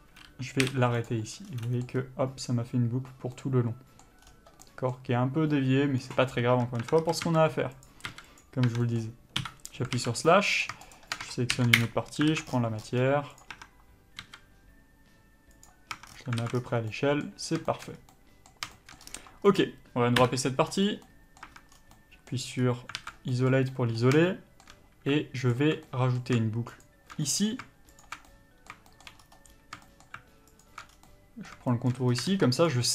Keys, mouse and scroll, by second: 0.1 a, 1.3 u, 3.6 middle click, 4.5-5.0 scroll down 1, 6.8 Tab, 7.3 a, 7.5 s, 8.1 click, 8.4 s, 9.0 Tab, 9.1 middle click, 9.7 KP_Divide, 10.2 alt+a, 10.9 click, 11.2 shift+click, 12.1 ctrl+l, 12.6 alt+a, 12.8 scroll down 1, 13.1 scroll up 1, 13.7 click, 13.8 Tab, 14.5 s, 16.2 Tab, 16.3-16.9 scroll down 2, 16.7 alt+a, 17.0 scroll up 1, 17.2 middle click, 18.0 shift+middle click, 18.2 scroll up 1, 18.4 middle click, 19.0 shift+middle click, 19.3 scroll up 1, 19.8 click, 20.5 KP_Divide, 21.1 scroll up 1, 21.3 middle click, 21.7 Tab, 22.0 scroll down 1, 22.2 middle click, 22.9-23.3 scroll up 1, 23.3 alt+a, 23.5 scroll up 1, 23.6 middle click, 24.9 shift+middle click, 25.8 alt+click, 26.1 middle click, 27.1 alt+shift+click, 27.5 middle click, 28.3 alt+shift+click, 28.5 middle click, 29.1 shift+middle click, 29.5-30.1 scroll up 1, 30.1 shift+middle click, 30.9 alt+shift+click, 31.2 scroll down 1, 31.3 middle click, 32.0 shift+middle click, 32.3 scroll up 1.